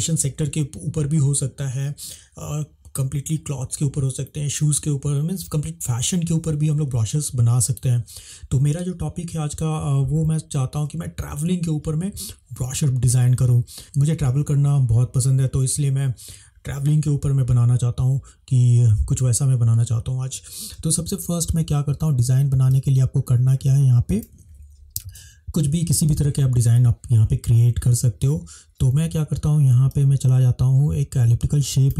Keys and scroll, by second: 22.6 space.